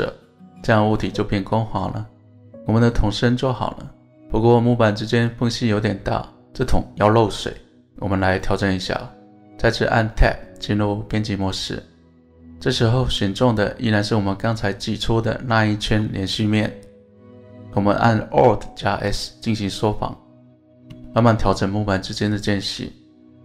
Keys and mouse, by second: 0.0-0.9 middle drag, 1.4-4.9 middle drag, 7.6-8.9 middle drag, 9.8 Tab, 18.4 alt+s.